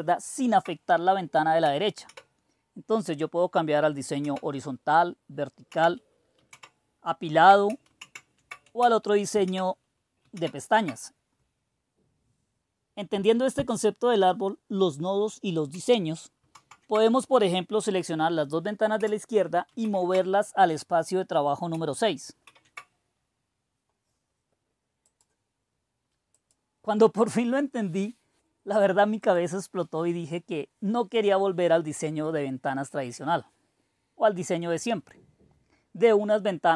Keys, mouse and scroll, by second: 2.0 super+e, 4.1 super+e, 5.6 super+w, 6.4 super+s, 7.9 super+w, 9.4 super+e, 10.3 super+e, 16.4 super+a, 19.7 super+&, 22.3 super+6, 25.1 click, 26.3-27.4 drag, 26.9-28.0 scroll down 1, 28.0-28.5 scroll up 1, 29.2 click.